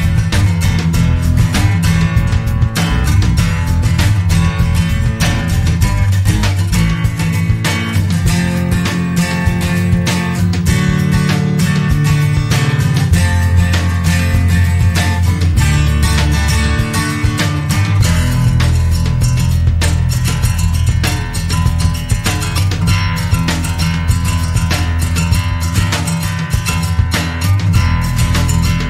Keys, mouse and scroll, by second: 0.0 click, 1.0 click, 2.5-3.0 scroll down 2, 3.2-3.6 scroll up 2, 4.2 scroll down 2, 5.7-6.5 scroll down 2, 6.7-7.4 scroll down 2, 8.6-9.3 scroll down 4, 10.9 click, 17.1 scroll down 2, 17.8 scroll down 2, 20.6 click, 21.2 click, 21.9 click, 23.7 click, 25.2 click.